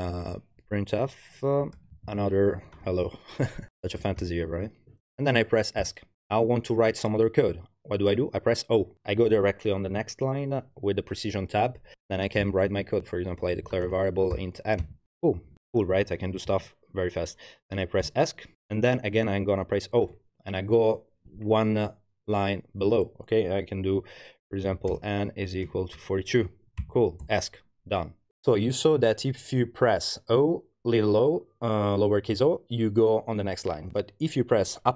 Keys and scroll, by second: 0.0-4.7 typing, 1.6 Page_Down, 13.3-14.8 typing, 15.4 Home, 15.6 Left, 16.5 space, 17.0 BackSpace, 18.0 Escape, 20.1 o, 24.7-26.8 typing, 27.2 Escape.